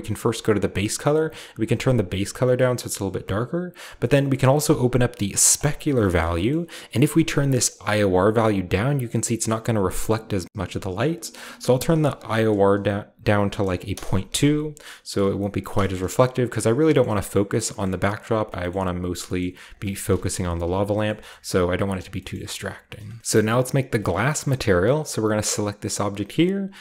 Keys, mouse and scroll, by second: 0.6 typing, 0.8 drag, 3.3-4.0 drag, 4.0-4.6 middle drag, 4.6-5.6 scroll up 1, 4.7 typing, 5.6-7.5 drag, 11.1 click, 11.7-13.6 drag, 13.6-15.7 typing, 14.6-15.2 scroll down 1, 14.8-15.3 middle drag, 15.7 middle click, 15.9-16.4 shift+middle drag, 15.9-16.3 shift+scroll up 1, 16.3 shift+scroll down 1, 16.9 shift+middle click, 17.0-17.7 typing, 17.2 middle drag, 17.2-18.4 scroll up 2, 17.8-18.4 middle drag, 18.5 middle click, 18.5-20.2 scroll up 3, 18.7 middle click, 19.3 middle click, 19.4-21.4 typing, 19.7 middle click, 20.2 scroll up 1, 20.9-21.5 right drag, 20.9-21.5 scroll up 1, 21.6-23.2 scroll down 1, 21.8-23.0 right drag, 23.2 ctrl+v, 23.4-24.9 shift+scroll up 1, 24.9-26.1 shift+right drag, 24.9-26.1 shift+scroll up 1.